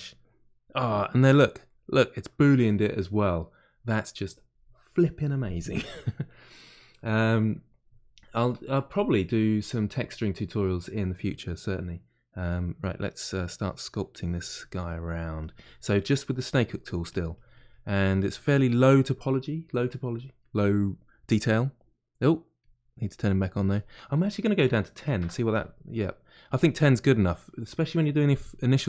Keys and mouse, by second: 0.2-12.8 middle drag, 12.8 click, 13.5 middle click, 14.2 click, 14.8 middle click, 15.4-16.5 drag, 16.5 middle click, 17.0-18.1 drag, 18.1-25.5 middle drag, 25.5 click, 26.0 middle click, 26.4 click, 26.8-28.5 middle drag, 28.5 click.